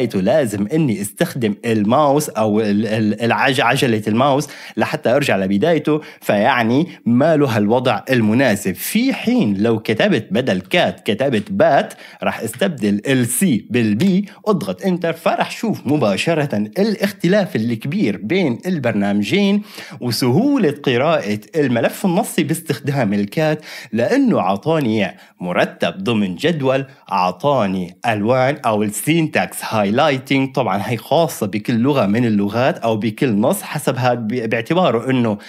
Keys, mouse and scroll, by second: 0.0 scroll, 0.1-4.4 scroll up 1, 5.1-6.3 scroll down 2, 6.3-8.2 scroll down 1, 8.2 scroll down 1, 9.2 ctrl+l, 10.7 Escape, 10.7-12.6 typing, 14.0 Return.